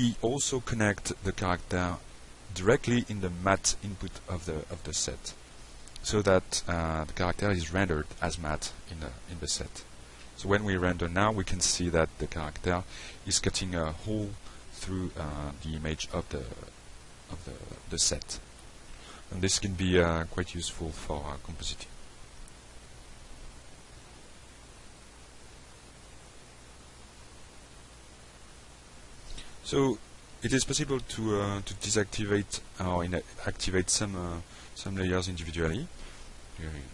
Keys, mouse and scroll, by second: 5.1 click, 5.8 click, 6.4 click, 7.3 click, 7.7 middle click, 8.5 click, 9.1 click, 9.6 click, 10.1 click, 10.9 F5, 23.9 click, 24.7 middle click, 26.0 middle click, 31.7 click, 32.5 click, 34.2 click, 35.0 click, 35.9 click, 36.5 click.